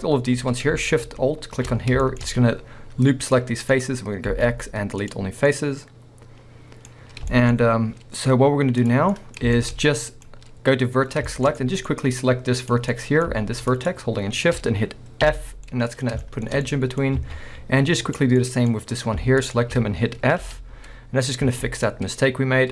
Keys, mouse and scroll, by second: 1.8 scroll down 2, 2.0 shift+middle click, 2.2-3.3 scroll up 2, 3.3-3.7 middle drag, 4.3 x, 5.5-8.8 middle drag, 8.8-9.2 drag, 9.2-9.8 middle drag, 9.8 scroll up 1, 10.3-11.5 middle drag, 11.9-12.6 scroll up 1, 12.6 click, 12.9 middle click, 13.7 shift+click, 15.3 f, 15.6 scroll down 2, 15.7-17.2 middle drag, 17.2 alt+a, 18.0 click, 18.4-19.4 middle drag, 18.7 scroll up 1, 19.4 shift+click, 20.4 f, 20.9 scroll down 1, 21.5 alt+a, 21.9-22.4 middle drag.